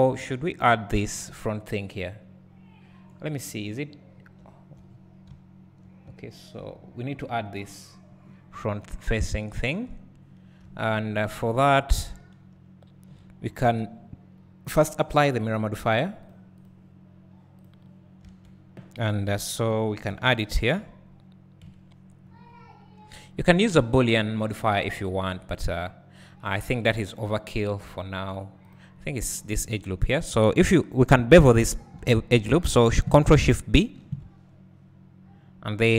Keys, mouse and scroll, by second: 9.2 `, 10.2 scroll down 2, 10.7 `, 13.3 1, 16.6 click, 17.8-18.4 drag, 18.4 Tab, 19.3 click, 20.1 KP_1, 21.6 KP_Decimal, 22.5 scroll up 1, 28.7 click, 33.9 ctrl+shift+b.